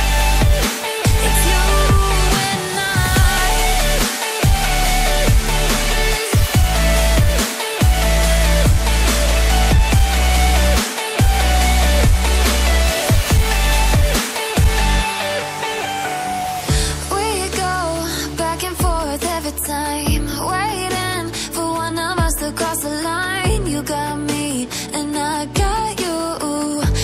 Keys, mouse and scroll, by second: 0.6-2.6 scroll down 1, 4.5 click, 5.1 scroll up 1, 5.9 click, 6.3-6.7 scroll down 1, 6.7 click, 8.5 ctrl+z, 8.8 ctrl+z, 9.3 ctrl+shift+z, 10.4 click, 11.1 right click, 12.1 click, 17.4 click, 20.0-20.4 scroll down 1, 20.4-21.1 scroll up 1, 21.1 click, 21.8 ctrl+c, 22.0 ctrl+v, 23.2 click, 26.3 click.